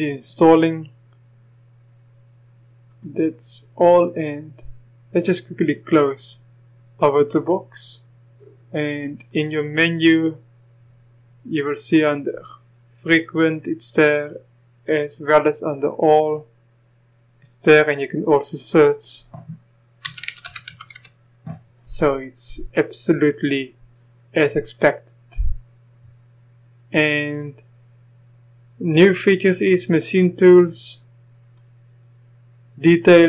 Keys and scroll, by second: 20.1-20.9 typing.